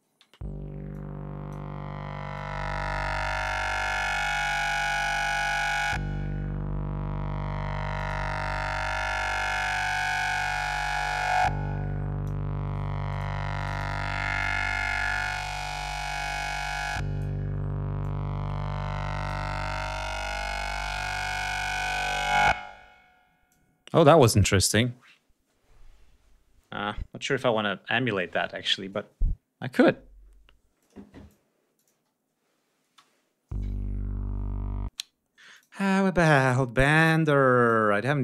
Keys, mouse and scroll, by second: 0.8 click, 2.2-3.5 drag, 4.0 click, 5.1 right click, 5.3 space, 7.8 click, 9.7 click, 10.4-12.3 drag, 12.3 scroll up 2, 12.9 click, 13.4 click, 14.7 click, 15.7 click, 16.4 click, 17.2-17.9 scroll up 4, 17.9-19.3 drag, 19.7 scroll down 2, 20.1-20.5 scroll up 2, 21.2-22.1 drag, 22.1-22.4 scroll down 1, 22.4-23.1 scroll up 1, 23.3 click, 30.6 click, 31.6 click, 31.8 space, 32.7 space, 34.7 space, 35.4 click, 37.4 click.